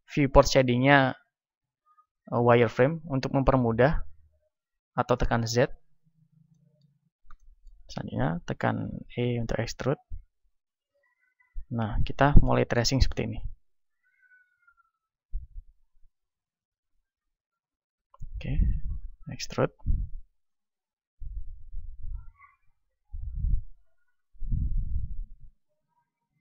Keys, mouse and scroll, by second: 2.0-4.4 drag, 5.6-9.1 middle drag, 8.8 e, 10.6-14.0 drag, 10.9 e, 16.3-18.2 drag, 17.9 e, 19.0-20.0 drag, 19.3 e, 20.8 e, 22.2 click, 22.9 e, 23.9 e, 25.9 e.